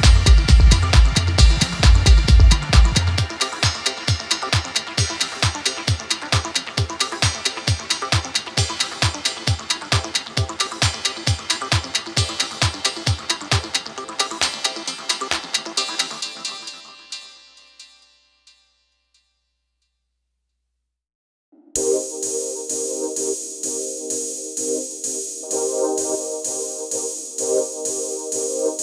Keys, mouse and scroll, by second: 4.8 click, 9.3 click, 13.3 click, 19.5-19.8 alt+scroll up 1, 20.5-21.2 alt+shift+drag, 28.1-28.4 alt+scroll down 1, 28.6-28.8 scroll down 1.